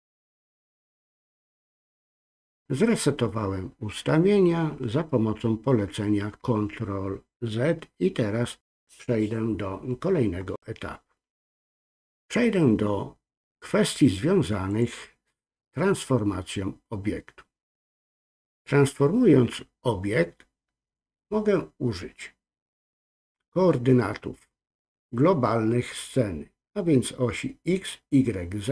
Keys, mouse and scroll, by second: 14.7-20.4 drag.